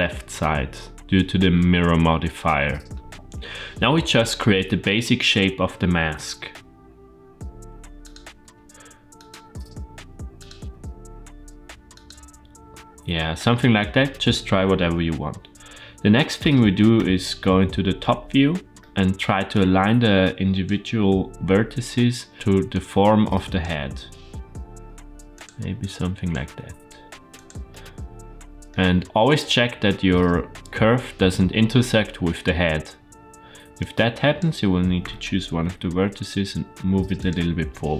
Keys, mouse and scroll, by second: 6.1 e, 8.1 e, 9.3 e, 10.4 e, 13.4 middle click, 16.8 KP_7, 18.7 shift+middle click, 19.4-20.5 drag, 21.4 g, 22.5 click, 23.8 g, 25.7 click, 26.3 g, 27.5 middle click, 33.6 click, 34.8 g.